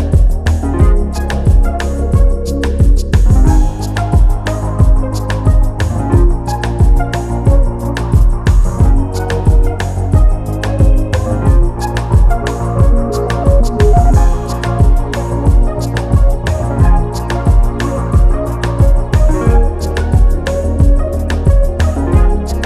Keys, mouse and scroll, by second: 0.1 click, 1.0-6.2 drag, 6.5 click, 6.9 scroll up 4, 7.5-8.7 drag, 9.2 scroll down 3, 9.4 scroll up 2, 9.6 Tab, 9.9 click, 11.0-12.3 drag, 12.3 KP_1, 13.2 scroll up 4, 13.4-14.0 scroll down 2, 14.0 click, 14.3 click, 15.2 click, 15.6-16.7 drag, 16.7 scroll down 1, 16.9 click, 17.6 Tab, 17.7 Tab, 17.8 click, 18.0 scroll up 2, 18.1-18.4 scroll down 2, 18.5 scroll up 1, 18.9 Tab, 19.2 click, 19.5 click, 19.9 click, 20.1-20.6 scroll up 6, 20.6 scroll down 2, 20.8 click, 21.2 click, 21.7 g, 22.5 scroll down 2.